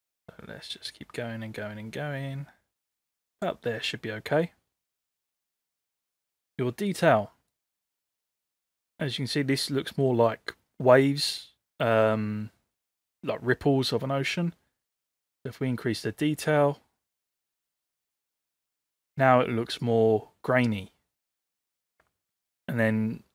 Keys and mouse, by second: 7.5-18.9 drag, 22.4-23.3 drag.